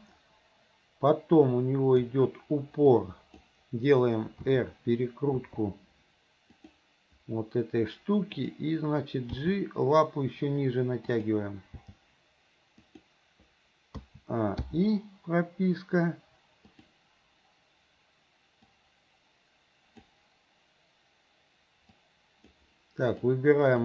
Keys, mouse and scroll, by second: 2.9 click, 4.4 r, 5.4 r, 8.4 click, 9.3 g, 11.8 g, 14.0 a, 14.7 i, 16.8 click, 18.8-20.2 drag, 22.0-22.6 drag, 23.2 click.